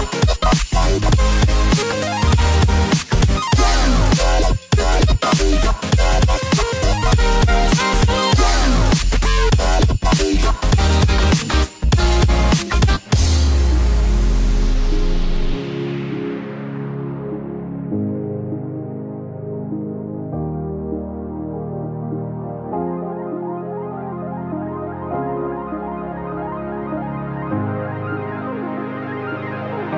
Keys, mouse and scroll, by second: 0.2 click, 1.9 click, 2.4 click, 2.4 x, 4.2 click, 5.3 alt+click, 7.1 ctrl+b, 20.9 i, 23.9 i, 28.1 e, 29.0 click.